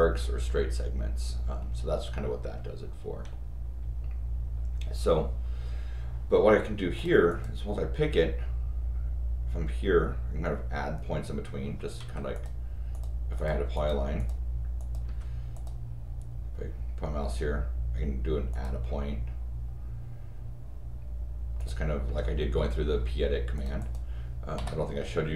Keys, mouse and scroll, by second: 6.9 click, 7.3 click, 12.0 Escape, 12.3 click, 12.9 click, 13.3 click, 13.7 click, 14.2 click, 14.8 click, 15.0 Escape, 15.5 click, 18.5 click, 21.6 click, 22.0 Escape, 23.5 click, 23.8 click.